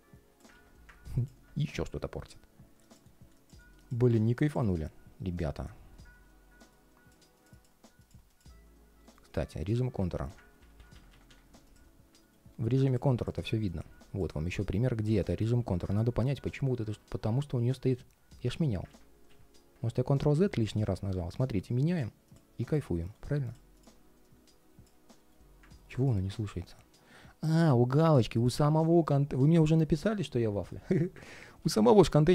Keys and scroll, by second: 0.2 super+z, 8.8 ctrl+shift+3, 10.3 super+z, 12.0 ctrl+shift+3, 12.5 ctrl+shift+3, 18.6 super+z, 22.8 ctrl+shift+3, 24.9 ctrl+shift+3, 31.3 super+z, 32.2 ctrl+shift+3.